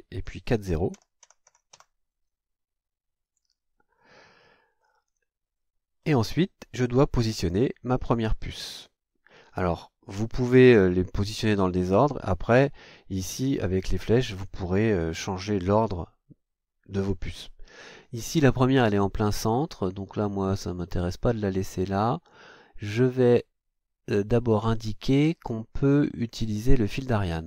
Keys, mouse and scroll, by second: 0.9 0, 3.2 click, 4.8 scroll down 2, 5.3-6.2 scroll down 3.